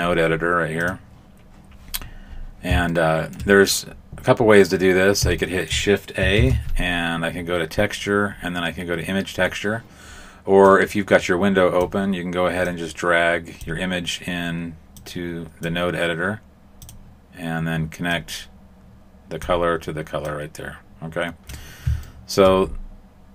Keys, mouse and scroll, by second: 1.9-2.9 scroll up 4, 2.9 shift+middle click, 2.9 scroll up 2, 5.4 shift+middle click, 6.3 shift+a, 15.1 click, 16.8 click, 18.1 click, 20.3 click, 22.0 shift+middle click.